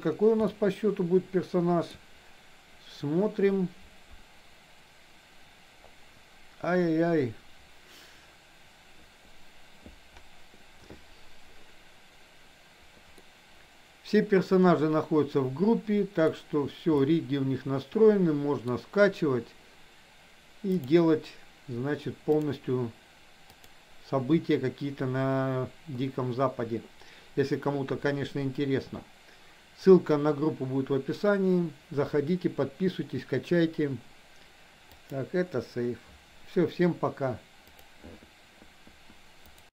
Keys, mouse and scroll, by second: 0.6 scroll up 1, 0.7-1.9 shift+middle drag, 1.9 scroll down 1, 13.2-16.2 middle drag, 16.2 scroll down 1, 17.2-18.7 middle drag, 20.7 click, 22.3 click, 23.6-35.4 drag.